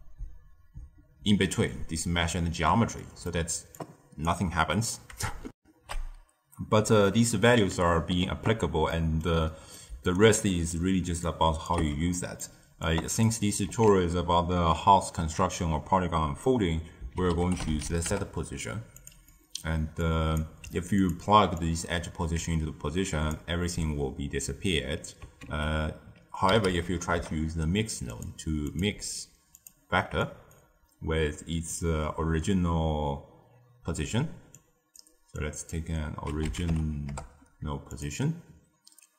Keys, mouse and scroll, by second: 2.9 middle click, 3.7 click, 5.5 ctrl+alt+shift+q, 8.8-9.9 middle drag, 9.9 d, 10.1-10.7 right drag, 10.7 d, 11.2 click, 11.7 x, 12.0-12.8 middle drag, 12.8 click, 13.6 ctrl+a, 19.2-19.9 middle drag, 19.9 drag, 20.6 g, 21.5 drag, 25.4 ctrl+a, 28.6-30.2 drag, 31.7 drag, 34.5 click, 35.3 drag.